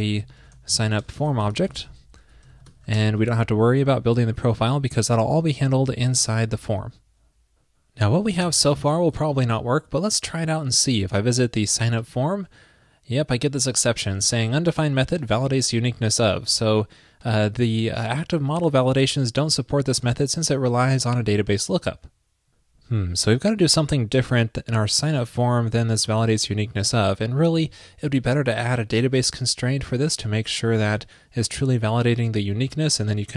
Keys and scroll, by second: 2.8 shift+super+Right, 6.3 super+s.